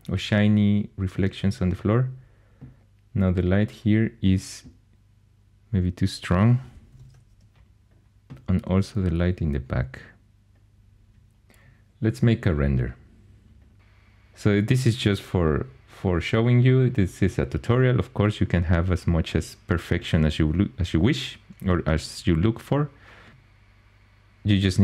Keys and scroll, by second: 6.6-7.4 typing.